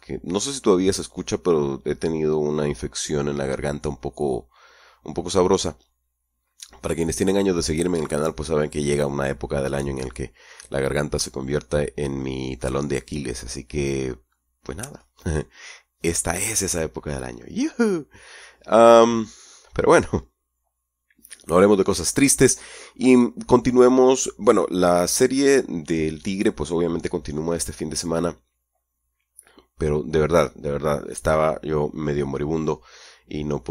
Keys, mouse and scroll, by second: 10.8-13.9 scroll down 1, 13.9-15.2 scroll up 3.